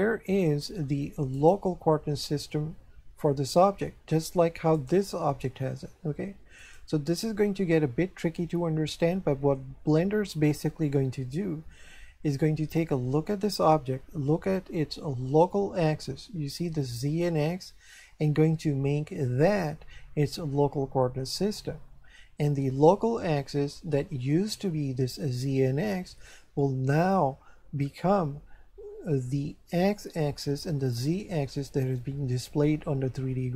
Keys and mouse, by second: 1.3 right click, 4.7 right click, 6.6 right click, 8.9 shift+middle click.